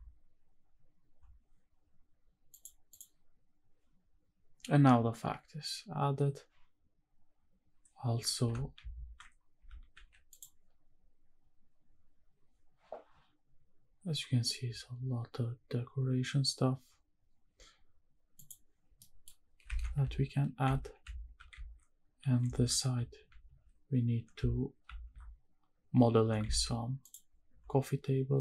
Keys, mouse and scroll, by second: 2.5 shift+click, 2.9 shift+click, 3.7 shift+`, 18.5 click, 19.0 middle click, 19.2-19.6 scroll up 2, 19.7 shift+`.